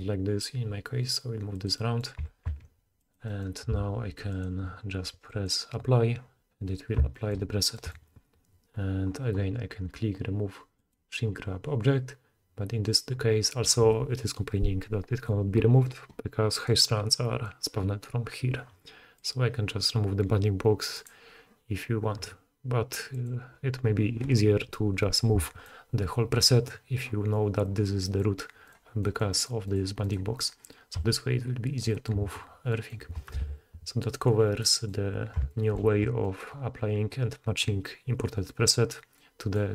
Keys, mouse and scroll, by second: 1.7-5.3 middle drag, 2.2 g, 3.7 s, 5.3 click, 6.7 drag, 11.1-16.6 middle drag, 16.6 click, 16.7-19.2 middle drag, 19.2 click, 19.3-20.9 middle drag, 20.9-22.6 drag, 23.3-28.6 middle drag, 28.6 click, 28.7-29.6 middle drag, 29.6 click, 29.8 middle drag, 30.0 click, 30.1 middle click, 30.4 click, 30.5-39.7 middle drag, 30.9 g, 33.4 alt+a.